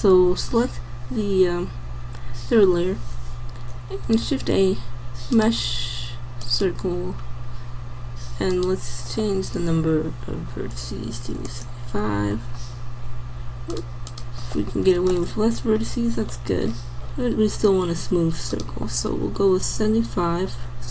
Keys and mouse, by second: 4.3 shift+a, 8.5-10.3 drag, 13.8-15.8 drag, 16.2-20.3 drag.